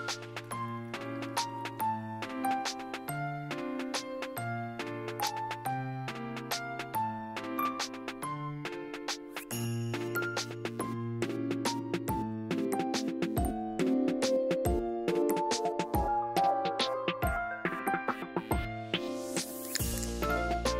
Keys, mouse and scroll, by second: 0.2 scroll down 3, 0.3 click, 1.2 m, 1.3 scroll down 2, 1.4 middle click, 1.5-1.8 scroll up 3, 1.6 click, 1.8 m, 1.9-3.7 drag, 3.7 middle click, 3.8-5.0 scroll down 5, 3.9 click, 4.2 m, 4.3 middle click, 4.7 click, 4.9 middle click, 5.0 middle click, 5.1 click, 5.4 middle click, 5.5 click, 5.5 middle click, 5.6 scroll up 1, 5.8 click, 5.9 middle click, 6.1 click, 6.4 middle click, 6.5 click, 7.0 middle click, 7.3 click, 7.6 scroll down 1, 7.7 middle click, 7.9 scroll up 2, 7.9 middle click, 8.0 click, 8.3 middle click, 8.5 ctrl+z, 8.5 click, 9.3 middle click, 9.4 click, 9.6 m, 9.7 scroll down 3, 9.7 middle click, 10.2 click, 10.9 ctrl+z, 11.0 ,, 11.0 m, 11.1 click, 11.4 middle click, 11.5 click, 11.8 middle click, 11.9 click, 12.1 middle click, 12.1 scroll up 1, 12.2 click, 12.4 middle click, 12.7 click, 13.0 middle click, 13.1 scroll down 1, 13.2 middle click, 13.3 click, 13.9 m, 13.9 middle click, 14.3 click, 14.3 m, 14.4 click, 14.7 middle click, 14.8 click, 15.0 m, 15.1 middle click, 15.4 click, 15.4 scroll down 1, 15.4 middle click, 15.5 m, 15.6 click, 16.0 middle click, 16.1 scroll up 1, 16.2 click, 16.9 middle click, 17.0 scroll down 1, 17.1 click, 17.4 middle click, 17.5 click, 17.7 `, 17.8 scroll down 1, 17.8 middle click, 17.9 click, 18.4 scroll down 1, 18.5 click, 19.1 n, 19.2 m, 19.3 middle click, 19.4 m, 19.5 click, 19.8 middle click, 20.0 m, 20.1 middle click, 20.7 click.